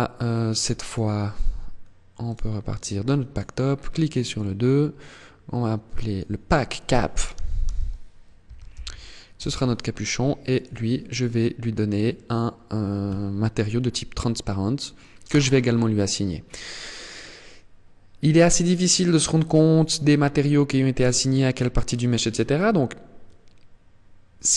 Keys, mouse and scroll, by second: 0.3 click, 2.8 click, 3.3 click, 10.0 click, 14.7 click.